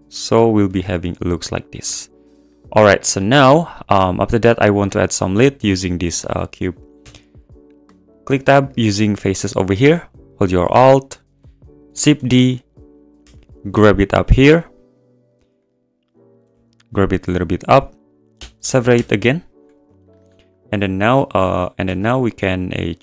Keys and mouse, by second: 0.4 click, 0.7 Tab, 0.9 click, 3.4 `, 4.3 click, 7.0 Tab, 8.6 click, 9.4 click, 10.6 alt+click, 11.9 shift+d, 12.4 shift+d, 13.2 g, 13.3 z, 15.6 click, 16.4 g, 16.5 z, 17.2 click, 18.3 p, 19.8 Tab, 20.5 click, 20.7 Tab, 21.1 Tab, 21.8 Tab.